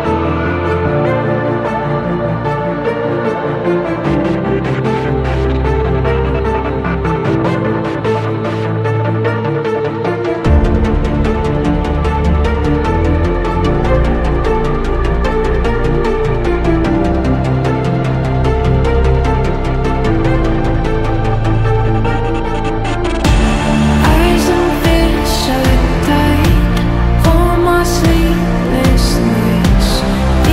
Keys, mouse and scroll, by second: 8.0 alt+scroll up 1, 9.3 ctrl+t, 13.2 ctrl+click, 15.8 ctrl+click, 20.4 ctrl+t, 22.3 ctrl+click, 24.7 ctrl+j, 25.7 ctrl+t, 27.1 ctrl+t, 27.5 ctrl+j, 28.5 Return, 29.8-30.5 typing.